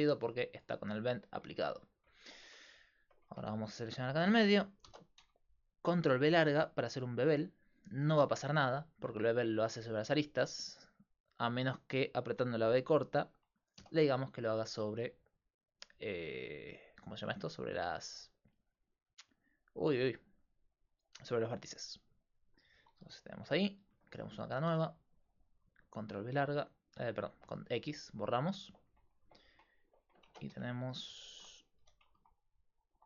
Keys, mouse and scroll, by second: 2.5 Tab, 3.3 ctrl+Tab, 3.7-5.7 right drag, 4.9 ctrl+b, 23.4 click, 24.7 x, 30.3 ctrl+Tab, 31.8 s.